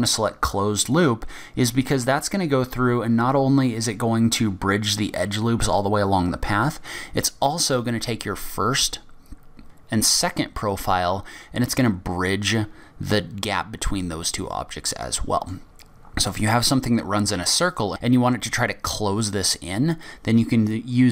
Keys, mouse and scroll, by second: 1.4 middle click, 14.6-15.1 scroll down 3, 15.0 middle click.